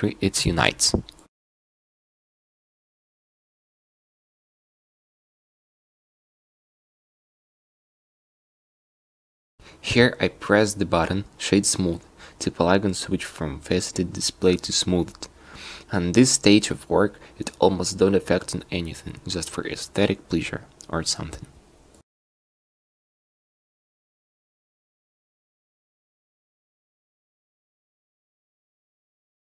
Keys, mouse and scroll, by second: 1.1 a, 1.3 a, 1.5 w, 4.0 q, 4.7 q, 10.8 a, 11.0 a, 11.6 w, 13.9 Tab, 15.8 q, 17.2 Tab, 17.8 a, 18.2 c, 20.3 a, 20.4 c, 21.7 a, 21.8 c, 22.5 a, 22.9 c, 24.3 a, 24.3 c, 25.7 a, 25.8 c, 26.9 a, 27.0 c, 28.3 a.